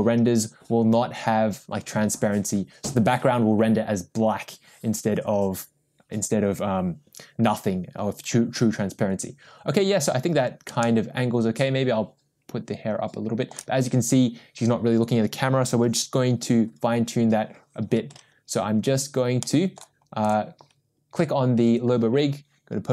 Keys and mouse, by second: 10.8-13.5 shift+middle drag, 18.1 KP_0, 19.4-19.8 middle drag, 20.2 click.